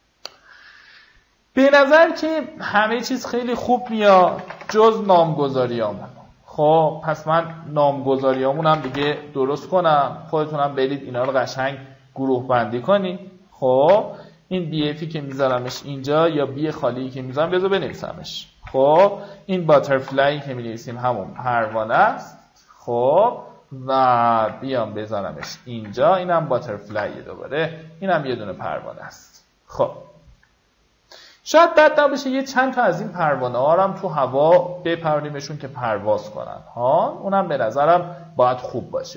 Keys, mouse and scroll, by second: 0.4 click, 4.1-5.4 typing, 6.1 click, 7.4 Escape, 7.8 click, 8.5-9.7 typing, 10.7 shift+click, 11.5 ctrl+g, 12.4-13.7 drag, 14.3 b, 15.6 BackSpace, 17.1-18.6 typing, 20.2-21.2 typing, 21.3 ctrl+a, 22.3 Return, 23.5 click, 24.0 ctrl+click, 24.7 ctrl+g, 25.3 click, 27.3 Return, 28.3 click, 28.8 alt+scroll down 1, 29.5-29.9 alt+scroll down 1, 30.5 alt+scroll down 1, 31.8 alt+scroll up 1, 33.7-34.4 alt+scroll down 1, 35.2-35.6 alt+scroll up 1, 37.1 click.